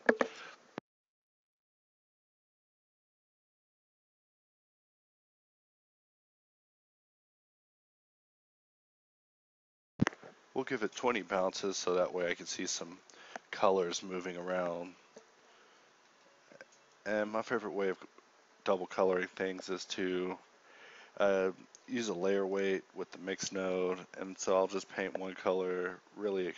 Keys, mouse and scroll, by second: 0.0 KP_Divide, 7.4 BackSpace, 10.9 Home, 12.1 g, 12.8 shift+a, 16.0 shift+a.